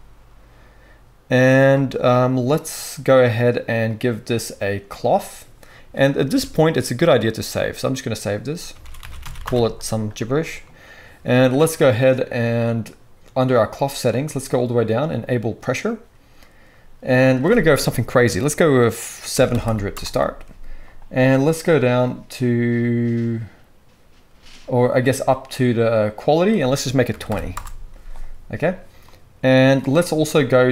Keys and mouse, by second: 4.1-4.9 drag, 6.3 ctrl+s, 15.7-17.3 drag, 19.6 0.